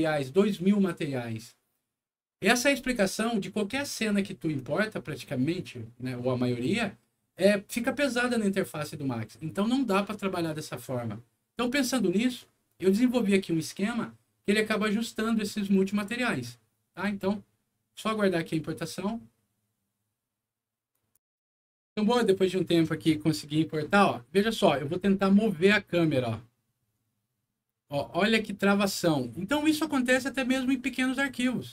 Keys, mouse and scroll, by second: 20.9 click, 25.5-31.7 middle drag.